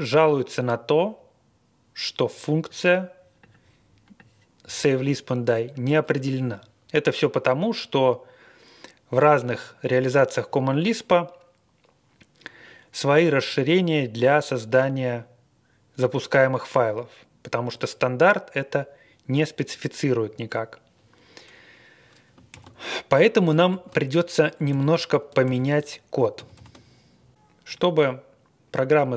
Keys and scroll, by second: 23.7 ctrl+d, 24.7 ctrl+d, 25.4 ctrl+d, 26.3 ctrl+d.